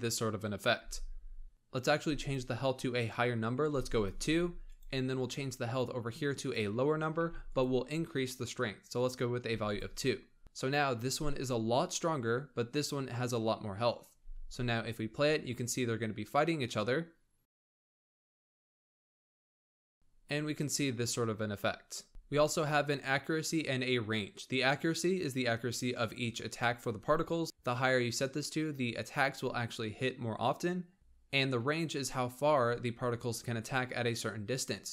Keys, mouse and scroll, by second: 0.6 space, 2.0-3.9 drag, 4.5 click, 6.2-7.4 drag, 8.8 click, 10.4 click, 14.0 space, 22.1 space, 31.1 space.